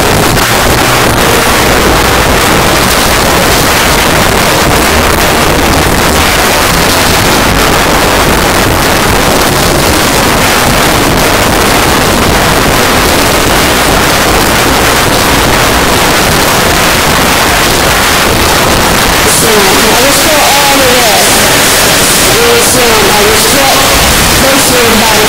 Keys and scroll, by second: 1.4 s, 1.6-2.3 Down, 2.5 Down, 2.7 Down, 2.9 Down, 2.9 Return.